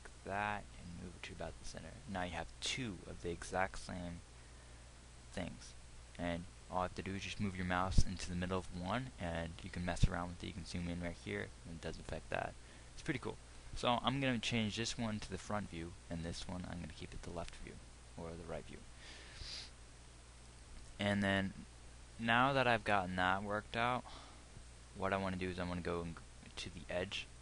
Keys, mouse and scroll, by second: 26.2-27.4 drag.